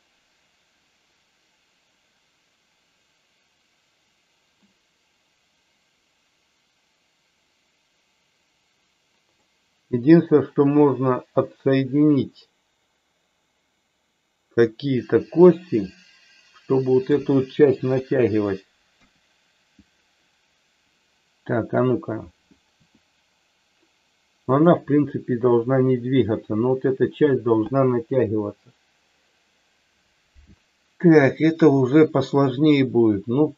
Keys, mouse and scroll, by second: 9.4-17.0 middle drag, 17.8 KP_3, 18.9 KP_1, 22.8 r, 24.4 click.